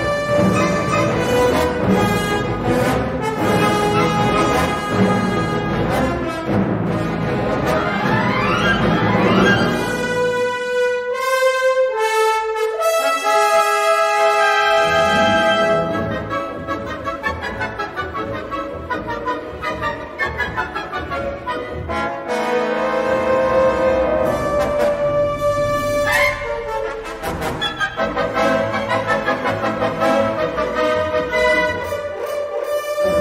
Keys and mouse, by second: 0.4 x, 2.3 l, 2.8 shift+d, 3.2 g, 9.4 middle click, 10.0 Tab, 10.2-11.7 middle drag, 12.3 shift+middle click, 12.7 middle click, 13.4 3, 13.8 Tab, 14.9 3, 15.5 middle click, 16.7 shift+click, 17.1 middle click, 18.0-19.2 drag, 19.5 middle click, 20.1 middle click, 20.8 e, 21.6 s, 22.5 g, 23.7 middle click, 25.4 middle click, 26.7 g, 28.6 middle click, 30.0 middle click, 31.5 middle click, 31.6 1, 32.3 middle click.